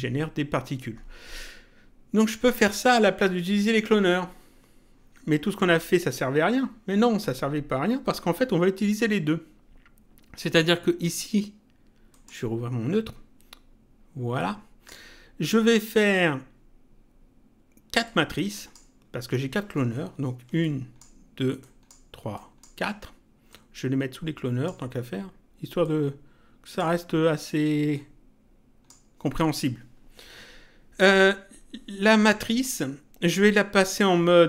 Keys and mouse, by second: 12.1 click, 14.3 click, 18.0 click, 20.6 ctrl+click, 23.5 click, 25.8 click, 27.9 click, 31.0 click.